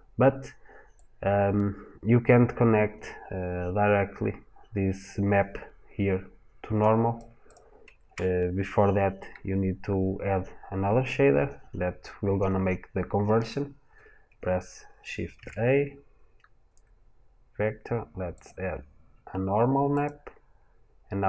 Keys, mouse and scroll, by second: 19.9 click.